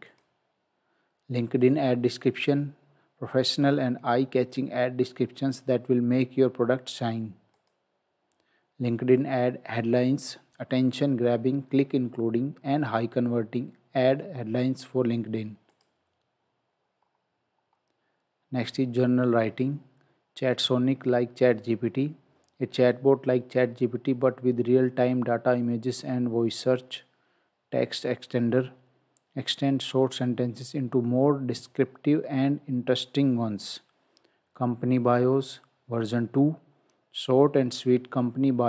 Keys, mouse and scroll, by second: 0.1 click, 7.6 click, 15.7 click, 17.0-17.7 scroll down 1.